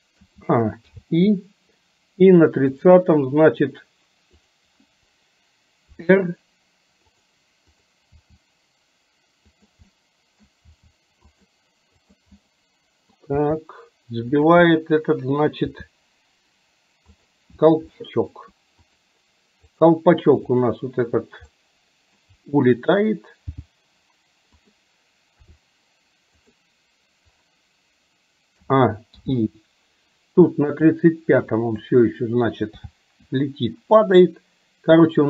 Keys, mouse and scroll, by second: 0.3 a, 1.0 i, 2.8 click, 4.4 click, 6.0 r, 8.3 r, 9.9 middle click, 12.2 click, 12.4 middle click, 13.5 r, 14.7 middle click, 15.8 r, 17.9-18.4 shift+middle drag, 21.7-22.3 middle drag, 23.5 g, 25.5 r, 28.7 a, 29.3 i, 30.8 click, 31.7 click, 32.9 g.